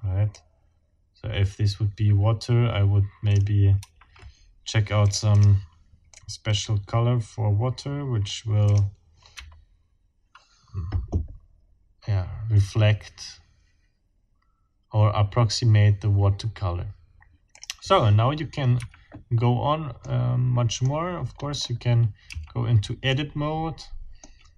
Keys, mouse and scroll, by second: 0.3-3.6 drag, 3.8 Escape, 5.0 click, 6.1-8.5 drag, 8.7 click, 9.4 F12, 17.5 click, 18.8 Escape, 19.4-19.7 scroll down 2, 20.0 middle click, 20.5 middle click, 21.4-21.8 scroll up 1, 22.3 Tab, 23.1-24.4 middle drag.